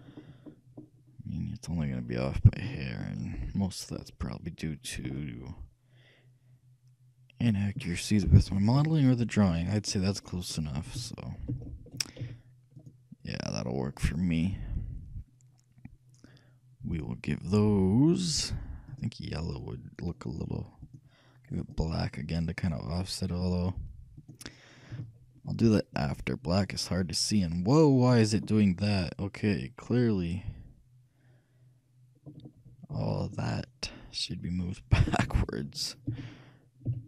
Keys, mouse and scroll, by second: 0.0 shift+middle click, 0.6 middle click, 0.9 middle click, 1.2-2.1 scroll up 1, 2.1-2.6 scroll down 1, 2.9-5.2 shift+middle drag, 5.3 shift+middle click, 6.6 middle click, 7.9-12.8 middle drag, 10.8 shift+a, 11.6 shift+a, 12.3 z, 14.1 shift+middle click, 17.0-20.1 drag, 20.9-22.6 drag, 23.5-25.3 drag, 25.0 a, 25.7-27.4 middle drag, 28.5-31.1 middle drag, 33.0 c, 36.3 g.